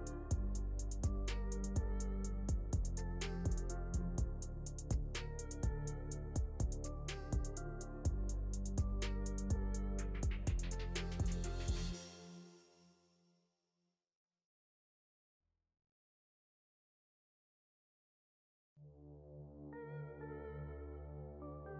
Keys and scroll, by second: 12.3 Escape, 15.5 Delete, 17.7 F3.